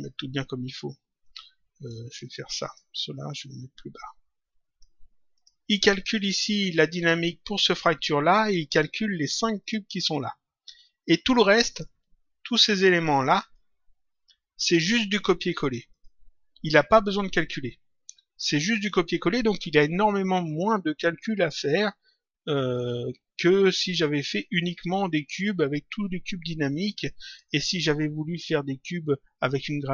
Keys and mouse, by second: 1.2 click, 2.5 click, 5.3 click, 8.4 click, 9.6 click, 11.6 click, 13.1 shift+click, 15.8 click, 27.2 click.